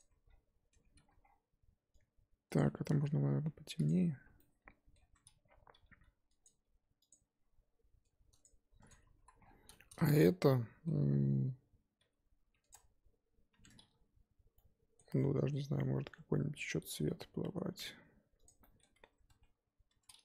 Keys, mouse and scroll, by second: 0.0 Tab, 0.2-0.7 scroll down 1, 0.7 Tab, 1.0 a, 2.6 Left, 2.9 g, 3.9 Tab, 5.7 g, 6.6 g, 8.4 Left, 8.9 Left, 9.1 l, 12.0 g, 12.7 Tab, 13.5 Tab, 16.2 g, 19.3 Tab, 19.9 Tab.